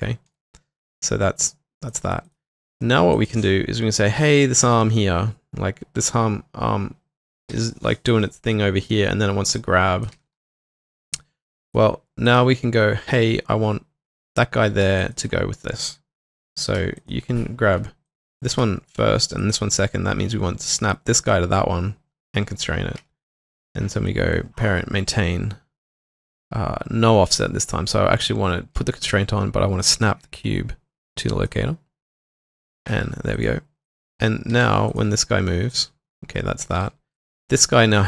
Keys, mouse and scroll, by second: 0.0-0.3 typing, 7.5 w, 10.1 typing, 10.7 alt+click, 15.0 shift+click, 17.0 shift+click, 19.4 shift+click, 23.4 typing, 33.8 double click, 34.5 typing, 36.8 typing.